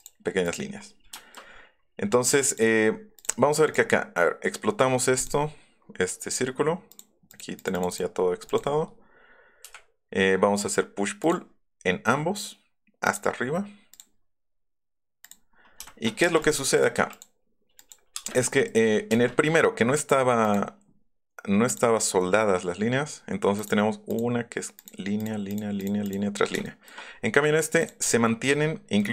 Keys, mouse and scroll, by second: 0.4 click, 0.7 scroll down 1, 1.1 shift+middle click, 1.5 shift+scroll up 2, 2.5 click, 2.9 middle click, 3.0 middle click, 3.2 click, 3.6 right click, 5.2 click, 6.9 click, 7.3 click, 7.6 click, 7.9 click, 8.5 click, 9.6 click, 9.6 p, 11.2 click, 13.0 click, 13.9 click, 15.8 shift+middle click, 16.2 middle click, 16.3 space, 16.4 click, 16.7 click, 16.9 m, 17.1 click, 17.8 click, 18.2 click, 18.2 space, 18.5 click, 18.8 scroll up 2, 20.4 click, 21.7 click, 27.8 click, 28.0 shift+middle click, 29.0 middle click.